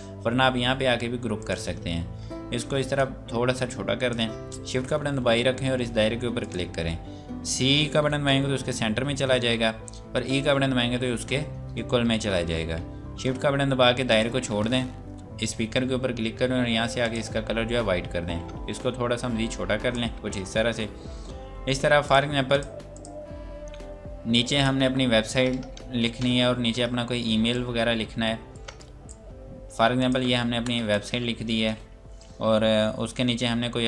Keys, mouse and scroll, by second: 1.4 click, 6.5 shift+click, 8.1 c, 10.3 e, 11.3 scroll up 1, 14.1 click, 17.0 click, 20.7 scroll down 1, 22.1 click, 23.7 F8, 24.3 click, 24.8 BackSpace, 26.0 ctrl+space, 26.4 scroll down 1, 27.4 click, 28.6 right click, 30.0 click, 30.5 e, 30.9 click, 32.9 scroll down 1.